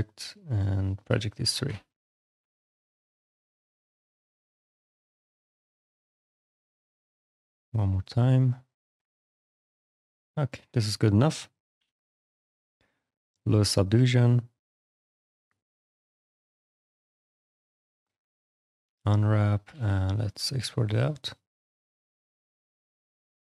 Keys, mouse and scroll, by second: 0.3 click, 0.9 click, 1.5 ctrl+d, 1.8 click, 2.3 ctrl+d, 2.5 click, 3.0 shift+f, 3.5 ctrl+d, 3.7 click, 4.9 click, 5.2 alt+click, 5.7 alt+click, 6.2 ctrl+d, 7.2 click, 8.5 shift+click, 8.9 alt+click, 9.5 click, 10.0 shift+click, 10.5 click, 11.6 shift+d, 12.2 shift+d, 12.6 click, 13.6 click, 14.9 click, 17.9 click, 19.2 click, 19.5 alt+x, 20.0 click, 22.9 click.